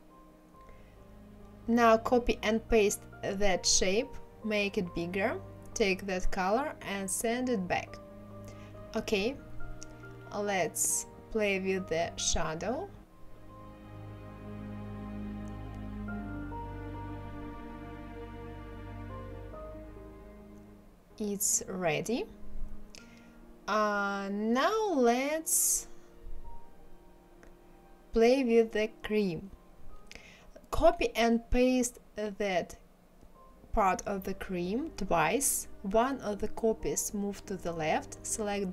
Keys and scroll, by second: 2.0 ctrl+c, 2.8 ctrl+f, 29.9 ctrl+c, 30.2 ctrl+f, 30.5 ctrl+c, 30.8 ctrl+f, 32.6 Left, 35.4 Right.